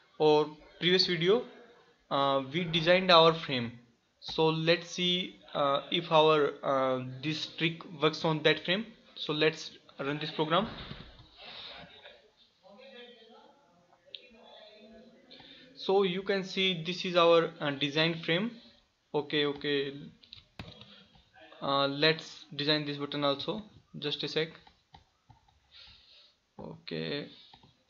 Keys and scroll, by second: 23.6 alt+F4.